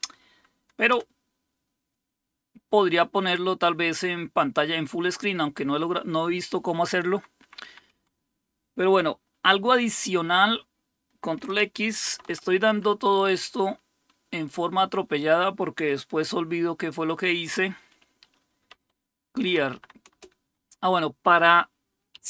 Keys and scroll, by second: 0.9 Escape, 7.1 Up, 7.4 Up, 7.7 Up, 7.9 Up, 12.1 ctrl+x, 18.7-20.2 typing, 21.9-22.2 typing.